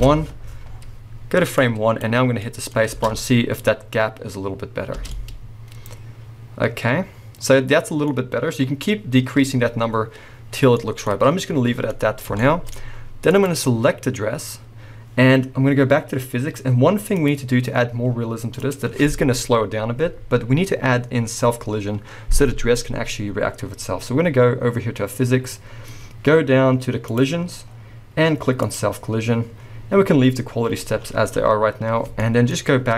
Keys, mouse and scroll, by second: 0.1 Return, 0.7-1.9 scroll down 1, 2.4-13.3 middle drag, 2.7 scroll up 2, 3.0 space, 5.1 space, 9.8-10.8 scroll down 2, 13.3 click, 17.1-28.8 drag, 23.2 scroll down 1, 27.3-28.7 scroll down 1, 30.6-32.2 scroll up 1, 32.2-32.9 middle drag.